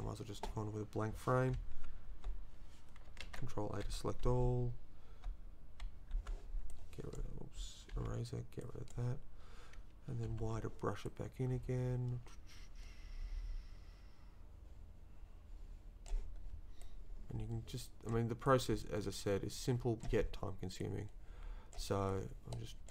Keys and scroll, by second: 1.9 Down, 3.2 ctrl+a, 4.3 a, 6.1 Right, 7.9 e, 10.3 y.